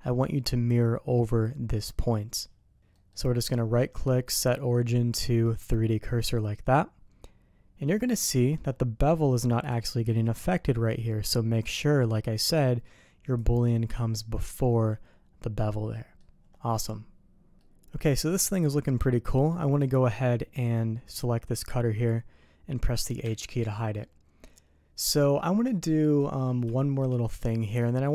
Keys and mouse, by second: 2.9 middle click, 3.5-5.7 drag, 6.3-7.8 middle drag, 8.3 middle click, 9.0 middle click, 9.6 click, 13.3-14.3 drag, 15.9 middle click, 16.8-19.4 middle drag, 23.2 h, 24.0-26.4 middle drag, 26.7 shift+middle drag, 27.2-27.7 middle drag.